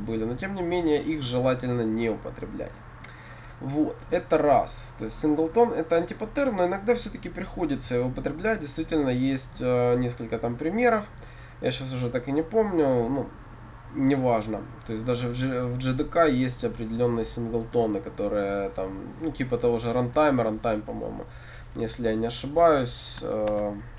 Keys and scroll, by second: 23.6 shift+Return.